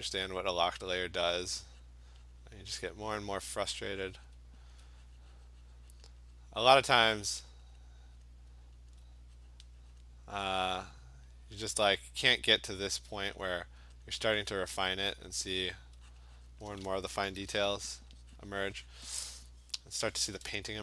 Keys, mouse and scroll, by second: 0.2-3.9 alt+click, 1.0 click, 1.4 click, 1.9 click, 2.3 click, 2.8 click, 3.2 click, 3.6 click, 4.3 click, 4.7 alt+click, 5.2 click, 6.0 click, 6.4 click, 7.1 click, 7.4 click, 7.8 click, 8.2 click, 8.9 alt+click, 9.5 click, 9.8 click, 10.0 click, 11.3 click, 12.0 click, 12.4 click, 12.9 alt+click, 13.4 click, 14.1 alt+click, 14.5 click, 15.0 click, 15.3 click, 15.7 alt+click, 16.2 click, 16.5 click, 17.3 ], 17.5 ], 17.7 ], 17.9 ], 19.3 click.